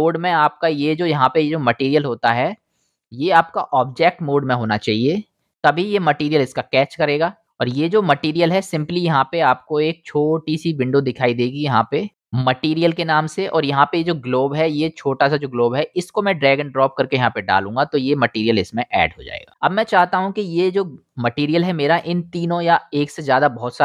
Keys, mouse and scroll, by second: 2.8-8.0 middle drag, 7.2-8.0 drag, 7.2-8.0 right drag, 16.8-17.4 middle drag, 17.4-18.2 drag, 18.6 middle click, 18.8-19.7 middle drag, 20.8-23.1 shift+middle drag, 23.4-23.8 middle drag.